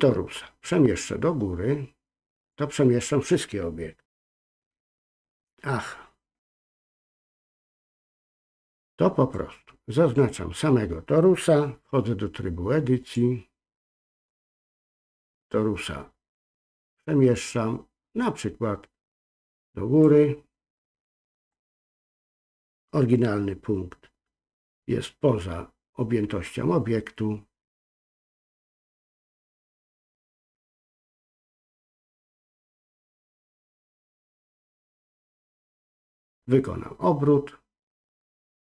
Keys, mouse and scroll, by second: 1.0-2.5 drag, 8.6 click, 9.3-10.1 drag, 13.0-14.4 drag, 20.1-21.5 drag, 29.6-33.2 drag, 33.8-34.7 drag, 38.1 click, 38.3-38.8 drag.